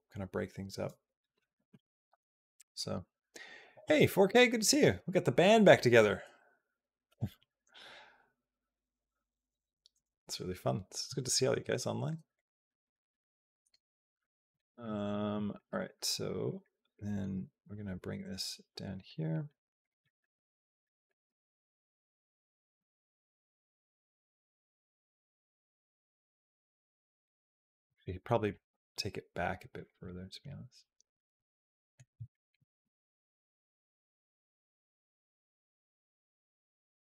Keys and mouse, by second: 12.2-13.6 drag, 14.1 shift+middle click, 14.9 click, 15.2 middle click, 15.7 r, 16.5 middle click, 17.1 g, 18.9 middle click, 19.6 click, 19.9 middle click, 20.7 middle click, 21.1 r, 22.6 g, 24.2 middle click, 25.0 r, 25.9 middle click, 27.0 click, 27.4 middle click, 28.1 middle click, 28.5 g, 29.9-31.7 middle drag, 32.2 shift+middle click, 32.7 r, 33.5-35.0 middle drag, 35.5 middle click, 36.5 click, 36.9 r.